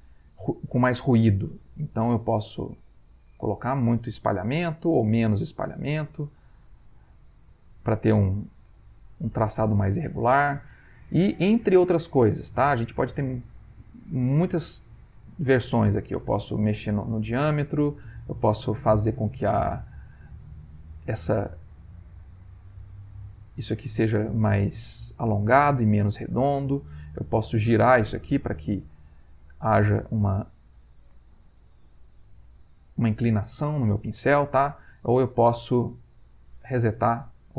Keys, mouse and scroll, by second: 3.3-4.4 drag, 5.0 click, 5.8-7.2 drag, 7.5-9.8 drag, 10.5 click, 11.6 click, 14.6 click, 16.4-17.5 drag, 17.9-19.6 drag, 20.6 click, 21.2 click, 22.2 click, 22.7 click, 23.6 click, 24.7 click, 25.5 click, 27.6 click, 28.5-29.6 drag, 30.1 click, 31.1-34.0 drag, 36.3 click.